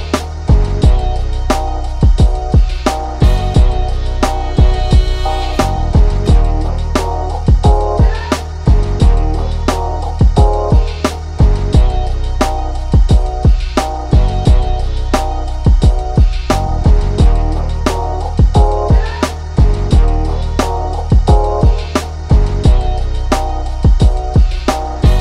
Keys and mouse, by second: 2.1-8.3 drag, 8.5 right click, 8.9-22.5 drag, 24.2 click.